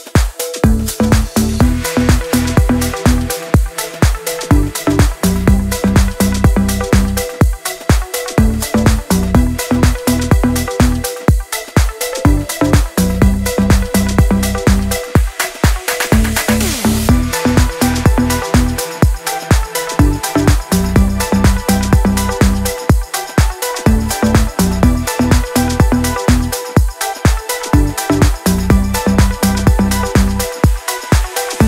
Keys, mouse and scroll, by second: 0.0 Down, 1.7 click, 2.4 Down, 3.0 click, 3.5 scroll down 1, 4.4-4.7 scroll up 1, 7.7 t, 10.1 F8, 10.3 click, 12.5-13.4 typing, 13.9 click, 17.8-20.4 shift+drag, 20.6-20.9 scroll down 1, 20.9 click, 21.5 ctrl+a, 21.6-22.2 scroll down 1, 22.2 click, 23.0-27.2 shift+drag, 27.2 scroll up 1, 27.4 scroll down 1, 27.8-28.7 scroll up 1, 30.7 scroll down 1, 31.1 shift+click.